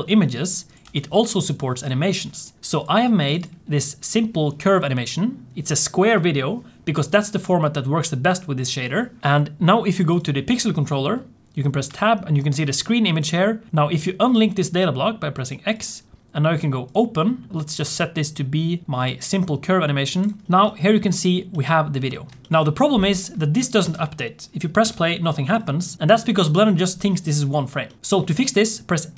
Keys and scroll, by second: 0.7 Tab, 11.8 Tab, 24.0 space.